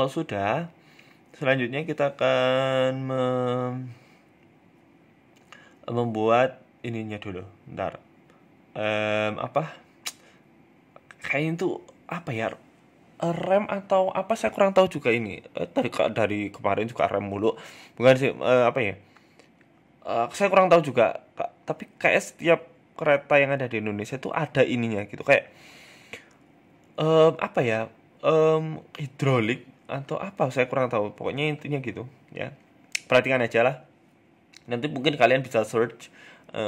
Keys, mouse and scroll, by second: 0.0 scroll up 2, 0.3 scroll down 1, 0.4-0.8 scroll down 4, 1.0 KP_3, 2.0 middle click, 2.6-3.0 scroll down 1, 3.2 KP_3, 4.4 shift+middle click, 4.7 shift+a, 7.4-8.4 scroll down 2, 8.4-9.2 scroll down 1, 8.4 r, 9.2 g, 10.7 s, 11.4 shift+middle click, 11.6-11.9 scroll up 5, 11.8 Tab, 12.0 click, 12.7 e, 14.2 s, 15.5 g, 17.1 ctrl+r, 17.5 s, 18.5 ctrl+b, 20.1 click, 21.1 g, 22.9 s, 24.3 shift+middle click, 24.7 click, 25.2 shift+middle click, 26.2 e, 27.9 ctrl+b, 31.5 scroll up 1, 31.8 click, 33.3-34.7 scroll up 3, 33.5 shift+middle click, 34.7 e, 35.2 s.